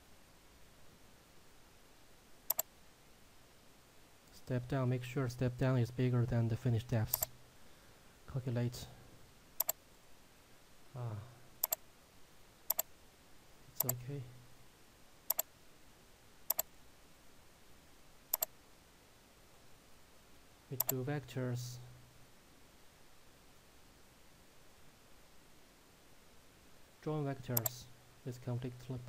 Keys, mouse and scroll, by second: 0.1-0.9 scroll down 1, 2.6 click, 7.6 click, 16.7 shift+click, 27.6 click.